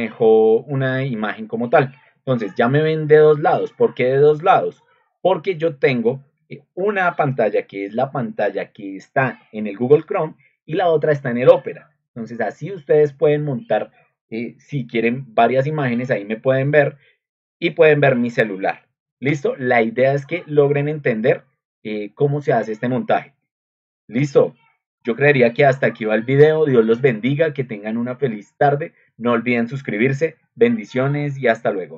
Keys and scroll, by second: 26.5 ctrl+alt+1.